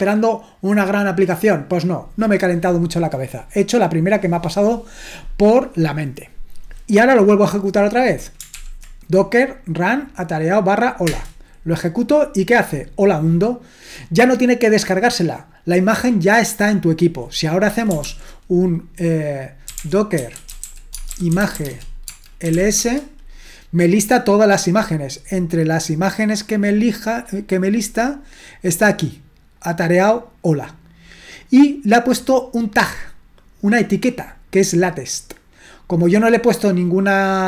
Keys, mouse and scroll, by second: 8.6 ctrl+p, 11.1 Return, 18.0 ctrl+l, 19.4-23.0 typing, 29.6-37.4 drag.